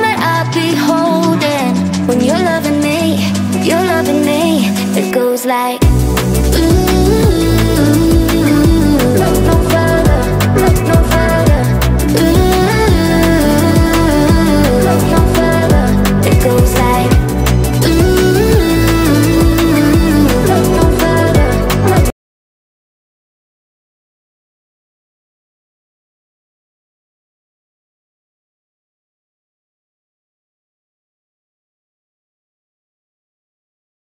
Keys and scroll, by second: 0.0-3.2 typing, 11.3 space, 15.1 Delete.